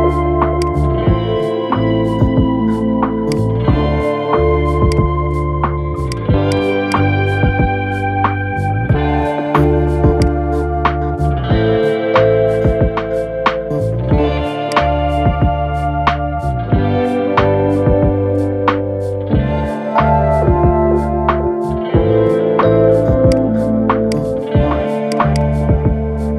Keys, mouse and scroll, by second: 9.9-12.8 drag, 12.8 scroll down 3, 13.4 Tab, 14.4 click, 14.8-15.3 scroll up 4, 15.3-16.6 middle drag, 16.6 scroll down 4, 18.3 scroll up 3, 19.3-20.1 middle drag, 20.5-21.7 shift+middle drag, 21.7 scroll down 1, 22.3-23.0 shift+middle drag, 23.0 click, 23.8 click, 24.8 click, 25.0-26.3 drag.